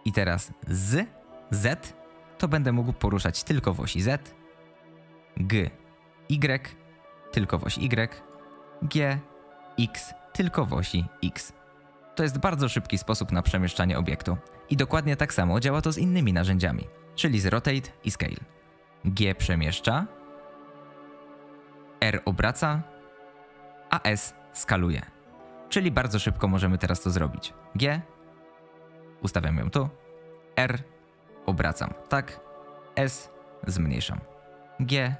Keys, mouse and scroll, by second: 5.4 g, 8.7 g, 19.1 g, 21.9 r, 24.0 s, 27.5 g, 30.4 r, 32.8 s, 34.5 g.